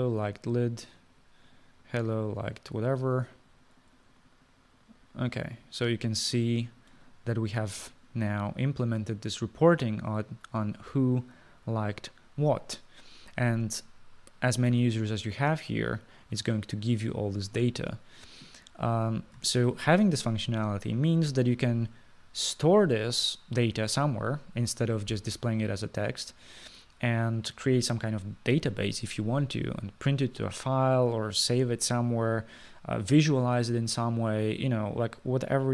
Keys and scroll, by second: 20.7 ctrl+s.